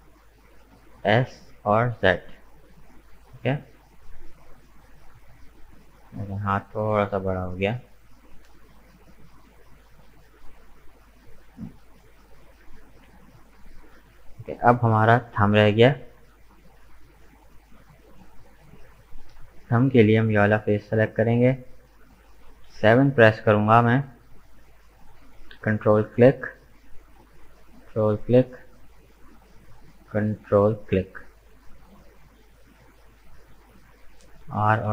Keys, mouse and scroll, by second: 0.9 s, 5.1-9.2 middle drag, 12.1-12.6 scroll down 1, 12.6 Tab, 12.7 right click, 13.1-14.7 middle drag, 14.7 right click, 15.1 Tab, 15.3-16.3 middle drag, 16.3 right click, 16.6 middle click, 17.2 right click, 17.5-19.6 middle drag, 19.6-20.7 drag, 20.7 right click, 21.2-22.7 middle drag, 22.7 KP_7, 25.9-31.9 ctrl+drag, 31.9-33.1 middle drag, 33.1-33.4 scroll up 2, 33.4 middle click, 34.4 r.